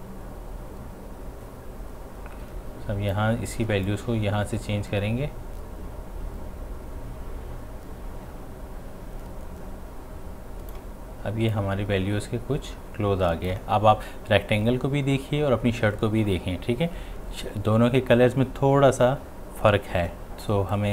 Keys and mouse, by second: 20.7-20.9 drag.